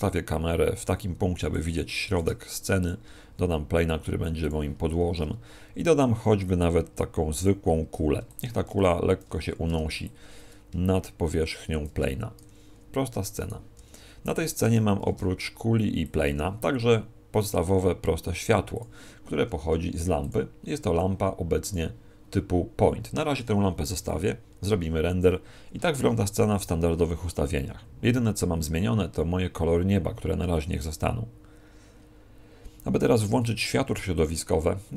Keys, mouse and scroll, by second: 1.5 click, 2.1 shift+a, 3.1 s, 4.5 click, 5.0 shift+a, 8.3 click, 10.1 ctrl+click, 13.4 right click, 13.8 g, 14.3 click, 15.0 shift+f, 16.1 click, 16.3 g, 18.8 click.